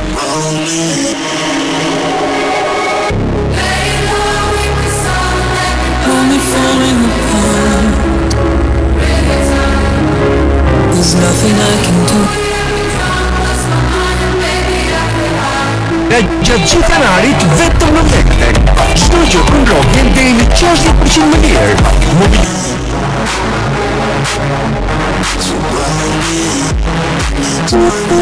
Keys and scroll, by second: 12.5 Page_Down, 22.5 Page_Down.